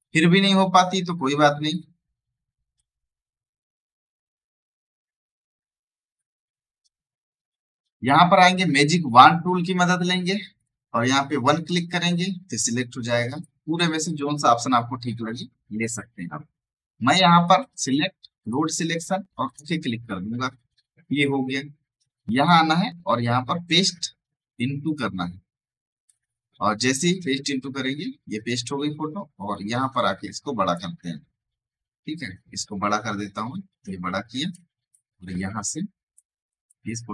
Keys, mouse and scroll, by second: 9.8 right click, 10.5 click, 13.6 v, 17.4 click, 22.2 click, 24.7 click, 27.1 ctrl+z, 29.3 click, 31.3 alt+scroll down 1, 32.5-34.8 alt+drag, 34.8-36.6 drag, 36.6-37.1 drag.